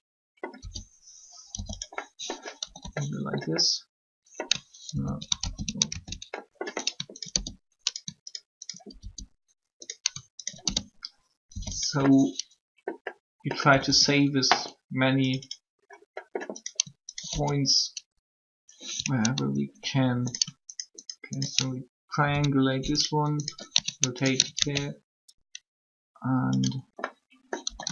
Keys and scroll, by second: 0.5-1.5 typing, 2.6 typing, 11.3 shift+0, 13.6 typing, 27.6 typing.